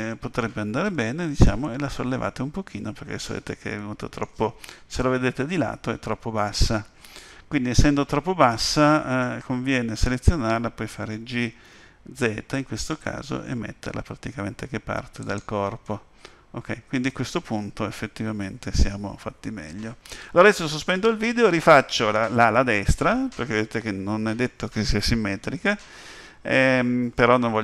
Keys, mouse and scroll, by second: 0.8 Tab, 1.6 middle click, 5.0 KP_1, 7.8 scroll up 1, 8.2-10.9 scroll down 1, 10.9 scroll down 1, 11.6 g, 15.8 middle click.